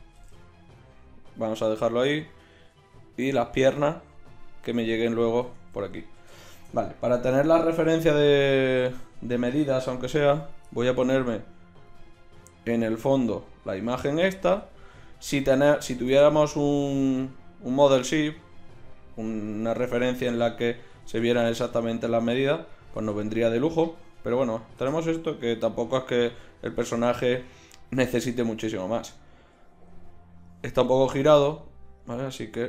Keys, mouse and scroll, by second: 0.1 g, 2.7 s, 3.5 g, 5.4 Tab, 9.0-9.9 drag, 10.1-10.5 drag, 11.4 drag, 11.9-12.9 drag.